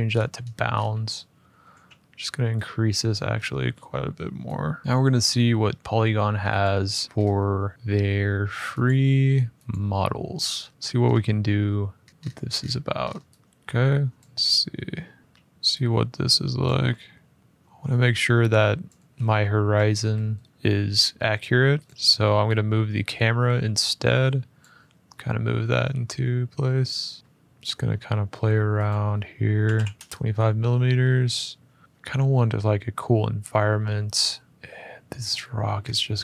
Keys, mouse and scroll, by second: 0.2 middle click, 0.5-1.3 scroll down 5, 1.3 middle click, 1.3 scroll up 4, 1.5 s, 2.3-2.8 scroll, 2.8 click, 3.1-4.0 scroll, 4.8 n, 6.5 click, 7.0 scroll, 7.7 scroll, 8.6 click, 9.4 click, 10.8 scroll, 11.8-13.3 scroll, 13.3 click, 13.3 g, 13.9 click, 15.2-16.4 scroll, 15.2 s, 16.4 click, 18.6 click, 18.9 ctrl+z, 19.3 ctrl+z, 21.1 middle click, 21.6 click, 24.3 click, 24.9 ctrl+click, 26.1 click, 26.6 click, 29.3 typing, 30.0 Return, 31.8 typing, 34.0 middle click, 35.3 middle click, 35.6 middle click, 35.9 click.